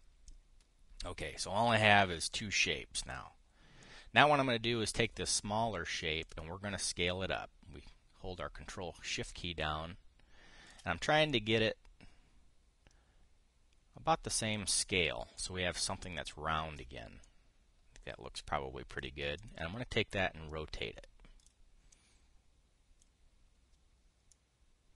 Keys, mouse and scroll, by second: 1.0-2.5 drag, 3.0 click, 4.5 click, 6.9-11.5 ctrl+shift+drag, 12.0-15.4 drag, 18.0-19.8 drag, 20.1 click, 20.9-22.3 drag, 22.6-23.8 drag.